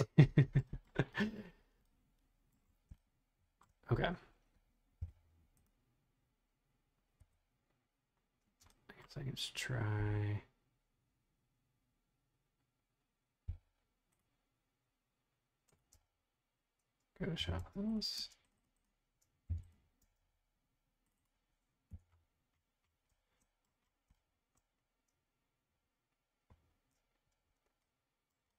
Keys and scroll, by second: 5.0 m, 7.2 Escape, 8.4 space, 13.6 m, 16.0 space, 17.4 b, 18.2 space, 19.5 b, 20.0 space, 21.9 BackSpace.